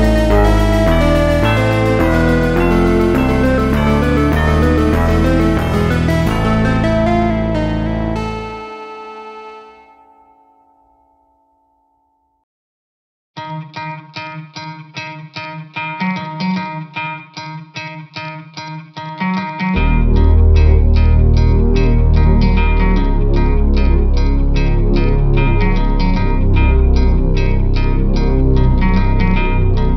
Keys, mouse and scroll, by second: 0.0 click, 0.2 click, 1.0 KP_1, 1.6 KP_7, 2.4 scroll up 1, 2.5 shift+d, 3.7 s, 4.9 shift+d, 6.7-7.4 scroll up 3, 7.4 click, 7.5 l, 8.2 g, 9.5 click, 10.0 g, 11.8 g, 12.7 KP_1, 13.2 scroll up 1, 13.4 KP_3, 14.3 click, 15.0 g, 15.6 KP_7, 16.1 g, 17.4 Tab, 17.5 KP_0, 18.0-18.6 scroll down 2, 18.6 click, 19.7-20.1 scroll down 3, 20.6 n, 21.2 n, 21.9 click, 22.2 n, 22.6-23.6 drag, 23.6 ctrl+a, 24.4 click, 25.9 ctrl+a, 26.9 n, 27.5 click, 28.3-28.9 scroll down 3, 28.9 click, 29.7 KP_5.